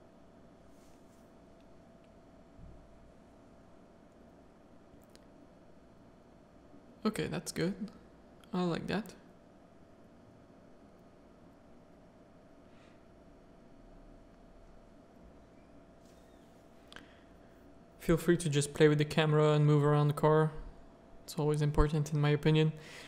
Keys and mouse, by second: 0.2 Tab, 0.6 z, 1.1 middle click, 1.6 alt+a, 1.9 middle click, 2.7 shift+middle click, 3.0 middle click, 3.3 z, 5.7 middle click, 6.4-12.0 middle drag, 13.0 KP_0, 15.2 ctrl+f.